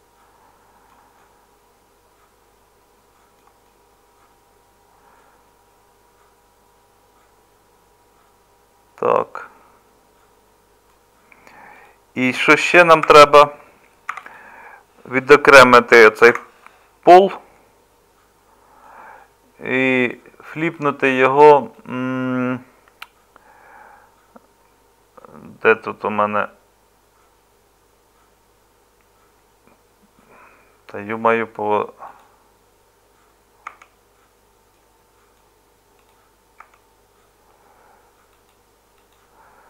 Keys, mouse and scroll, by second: 13.0 Tab, 14.1 3, 16.0 p, 33.7 Tab, 36.6 Tab.